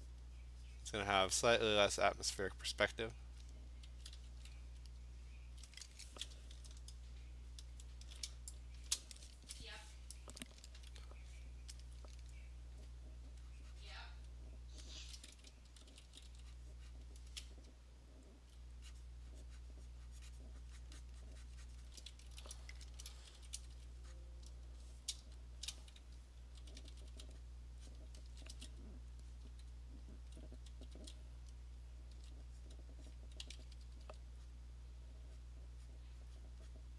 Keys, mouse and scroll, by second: 0.1 click, 0.4 click, 0.9 click, 1.4 click, 1.8 click, 2.3 click, 2.6 click, 3.4 click, 3.8 [, 4.1 [, 4.4 [, 6.5-6.8 scroll, 7.5 scroll, 9.0 click, 11.8 alt+click, 14.0 click, 14.9 alt+click, 15.7 [, 15.9 [, 16.1 [, 16.3 [, 17.0 click, 17.2 click, 18.5 alt+click, 19.1 click, 20.7 click, 20.8 click, 21.0 click, 21.3 click, 21.3 alt+click, 21.5 click, 21.8 click, 21.9 click, 22.3 alt+click, 22.4 Return, 23.1-24.5 typing, 24.2 click, 25.6 click, 25.6-27.1 typing, 27.5 click, 27.9 click, 28.3 [, 28.5 [, 30.3 alt+click, 30.6 alt+click, 30.7 [, 30.9 [, 32.1 [, 32.7 click, 33.2 click, 33.3 alt+click, 33.4 ], 33.6 ], 33.8 ], 34.0 ], 34.5 click, 35.4 click, 36.0 click, 36.4 click, 36.7 click.